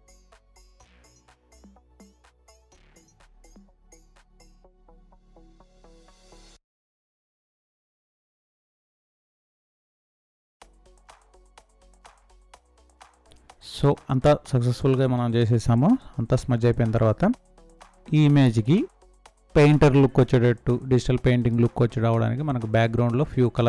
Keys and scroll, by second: 1.4 space, 3.3 Down, 9.0 ctrl+0, 13.6 ctrl+z, 16.1 ctrl+z, 21.3 space.